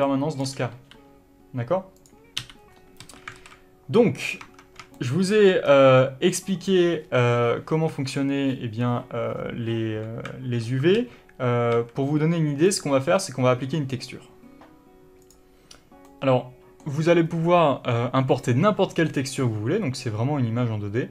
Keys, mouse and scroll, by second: 0.2 d, 0.7 d, 2.7 n, 4.5 scroll up 1, 4.7 Tab, 5.3 shift+middle click, 6.0 scroll down 1, 8.2 Tab, 10.7 alt+a, 13.0 middle click, 13.5 scroll up 1, 15.6-21.1 drag.